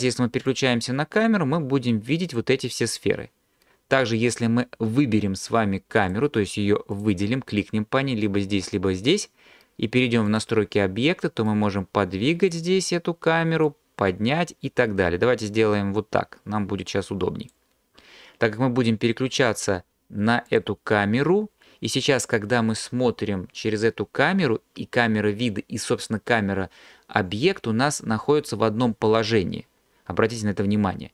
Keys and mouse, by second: 0.5 click, 2.3 click, 7.0 click, 10.4 click, 11.5-12.6 drag, 13.8-17.6 drag, 20.5 click.